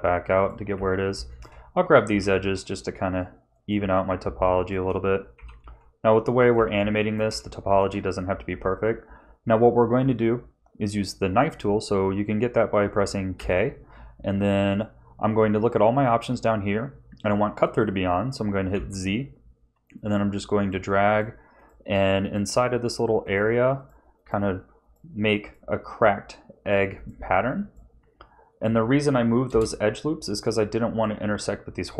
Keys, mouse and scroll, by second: 0.7 a, 1.3 alt+shift+click, 2.0 g, 3.7 a, 4.6 alt+shift+click, 5.3 g, 6.5 a, 6.9 shift+middle click, 7.5 shift+middle click, 13.3 k.